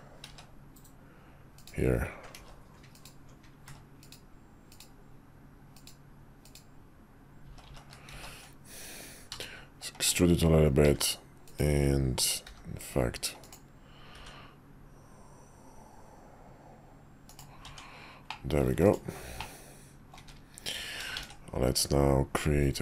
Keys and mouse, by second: 0.3 ctrl+z, 2.4 ctrl+z, 2.9 ctrl+click, 3.7 ctrl+z, 4.0 ctrl+click, 4.7 ctrl+click, 6.4 ctrl+click, 7.4 ctrl+z, 7.7 ctrl+z, 8.1 ctrl+z, 9.3 e, 10.8 r, 12.4 g, 14.1 r, 17.6 Tab, 18.3-18.6 middle drag, 19.4-20.1 middle drag, 20.2 `, 21.1 shift+a.